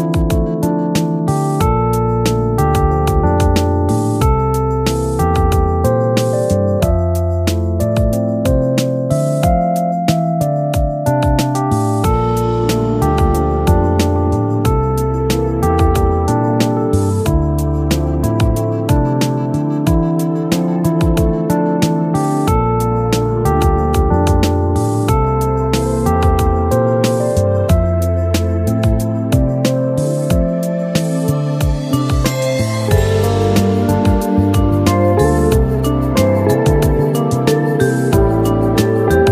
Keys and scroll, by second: 11.6 ctrl+shift+q, 23.3 ctrl+shift+q, 27.3 ctrl+shift+q, 36.0 ctrl+shift+q.